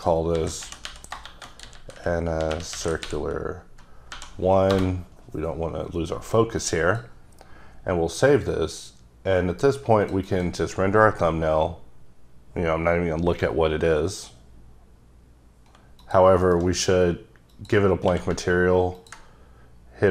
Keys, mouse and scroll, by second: 0.3-3.0 typing, 4.1 1, 4.8 Return, 6.6 click, 8.5 click, 10.3 double click, 16.0 click, 16.5 m, 17.7 click, 18.1 q, 19.0 ctrl+click.